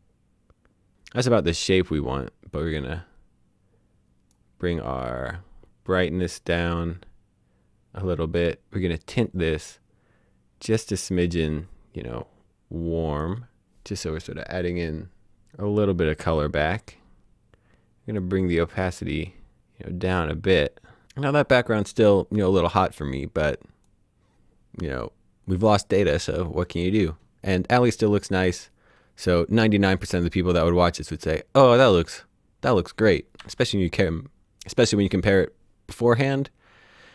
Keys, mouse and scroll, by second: 2.6 click, 6.0 click, 11.2 click, 18.1 click, 23.9 click, 25.5 click, 30.1 click, 33.5 alt+d, 34.7 typing.